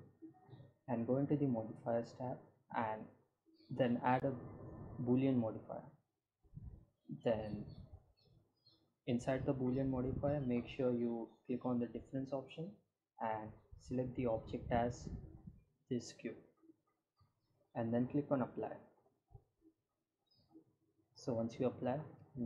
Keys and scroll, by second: 21.1 g, 21.4 z.